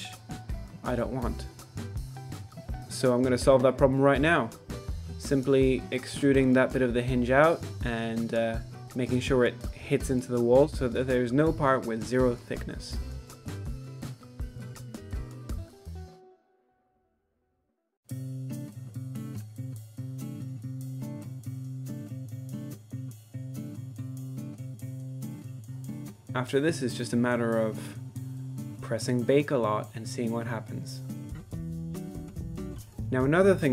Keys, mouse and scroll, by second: 0.9 middle click, 1.5 ctrl+z, 1.7 middle click, 1.8 ctrl+z, 1.9 middle click, 2.1 middle click, 2.5 middle click, 2.8 alt+click, 3.1 2, 3.5 alt+shift+click, 3.7 middle click, 3.9 z, 4.1 middle click, 4.3 alt+shift+click, 4.6 alt+shift+click, 4.7 middle click, 5.2 alt+x, 5.5 alt+x, 6.1 middle click, 6.4 z, 6.5 middle click, 6.6 1, 6.8 click, 7.2 z, 7.4 ctrl+r, 9.6 ctrl+r, 10.6 alt+a, 10.7 middle click, 10.8-13.4 typing, 11.0 middle click, 11.1 middle click, 11.5 shift+middle click, 11.7 middle click, 12.1 middle click, 13.0 shift+middle click, 14.4 middle click, 14.8 ctrl+z, 15.0 alt+a, 15.1 shift+middle click, 15.7 middle click, 16.0 shift+click, 16.2 middle click, 16.4 z, 16.7 z, 16.8 z, 16.9 alt+a, 17.0 shift+middle click, 18.0 middle click, 18.4 KP_7, 18.7 e, 19.6 g, 19.9 shift+middle click, 20.2 middle click, 20.5 middle click, 20.6 alt+a, 20.9 middle click, 21.2 KP_7, 21.8 shift+click, 22.1 e, 24.3 middle click, 24.4-25.4 typing, 24.6 middle click, 24.7 alt+a, 25.0 middle click, 25.6 shift+middle click, 25.9 middle click, 26.8 KP_1, 26.9 z, 27.2 z, 27.5 drag, 28.0 Tab, 28.0 middle drag, 28.4 middle drag, 28.8 click, 29.2 middle drag, 29.5-30.7 drag, 30.8 middle click, 31.3 drag, 31.5 middle click, 31.8 click, 32.5 click, 33.0 click.